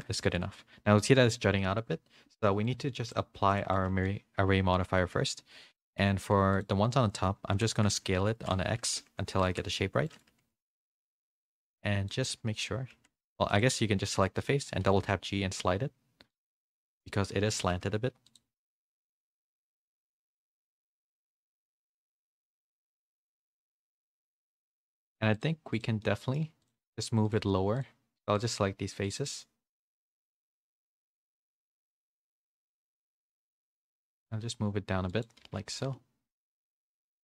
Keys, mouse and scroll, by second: 0.3 click, 2.6 click, 3.5 click, 3.9 ctrl+a, 5.0 Tab, 5.7 middle click, 6.2 3, 6.5 click, 7.5 l, 8.9 w, 9.3 s, 11.9 s, 12.1 middle click, 12.9 3, 13.5 click, 14.2 middle click, 14.8 g, 16.6 middle click, 18.7 g, 20.0 g, 20.3 middle click, 21.3 middle click, 22.0 click, 22.3 g, 23.2 middle click, 23.7 middle click, 24.8 Tab, 25.0 3, 25.3 click, 26.0 middle click, 26.6 shift+click, 27.3-28.4 shift+drag, 29.0 shift+click, 30.0 shift+click, 30.8 shift+click, 32.0-33.8 shift+drag, 33.8 g, 35.4 a, 35.7 g.